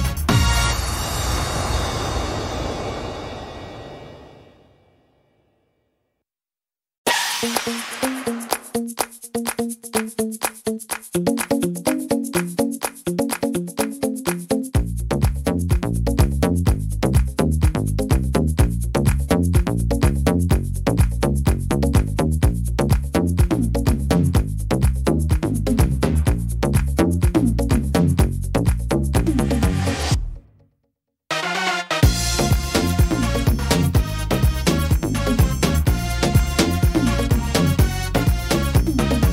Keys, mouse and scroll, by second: 1.7 click, 1.7 middle click, 2.7 middle click, 3.0-3.5 scroll down 1, 3.5 middle click, 5.6 click, 6.8-7.4 scroll up 5, 7.4 shift+middle click, 8.1-8.7 scroll up 1, 8.7 middle click, 8.7 scroll up 1, 9.0-9.7 scroll down 9, 10.0 middle click, 10.5 shift+middle click, 10.8-11.3 scroll up 3, 11.2 middle click, 14.7 middle click, 15.2 shift+middle click, 15.5-15.9 scroll up 2, 15.9 shift+middle click, 17.0-17.6 scroll down 3, 17.5 middle click, 18.8 middle click, 19.4 scroll up 2, 19.7 middle click, 20.7 right click, 21.3 shift+right click, 22.0 click, 23.6 middle click, 25.1 click, 26.1 middle click, 26.4-26.9 scroll down 2, 26.9 middle click, 27.2 scroll down 2, 27.7 middle click, 28.7 right click, 29.8 click, 31.0 middle click, 32.0 right click, 32.9 click, 33.7 middle click, 34.2-34.7 scroll down 2, 34.6 middle click, 35.1-36.1 scroll up 5, 35.5 middle click, 36.3 middle click, 36.9-38.0 scroll down 4, 37.3 middle click, 38.3 middle click, 38.9 right click.